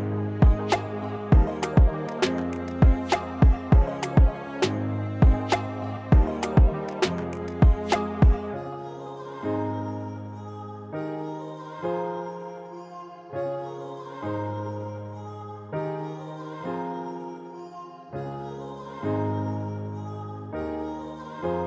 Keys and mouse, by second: 2.7-4.1 middle drag, 9.9 middle click, 15.3-17.5 middle drag, 18.0-19.9 middle drag, 21.5-21.6 middle drag.